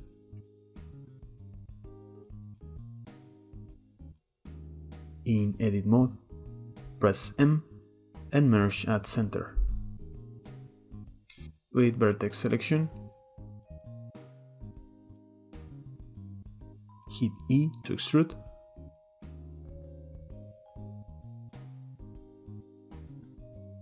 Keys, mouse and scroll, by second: 1.2-1.7 middle drag, 1.7 click, 2.2 KP_7, 2.7 g, 3.4 s, 4.1-4.7 scroll up 1, 4.7 g, 5.3 Tab, 7.6 m, 10.2-10.9 shift+middle drag, 10.9 click, 11.8-12.9 drag, 13.2-16.2 shift+middle drag, 17.1 e, 18.5 drag, 20.3 click, 20.7 click, 21.9-22.5 shift+middle drag, 22.5 drag, 22.8-23.8 shift+middle drag.